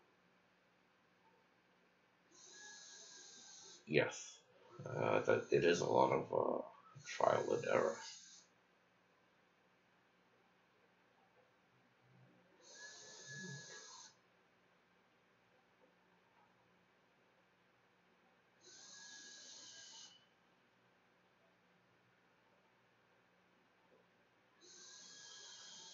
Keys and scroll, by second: 14.5-19.3 typing, 22.8-25.9 typing.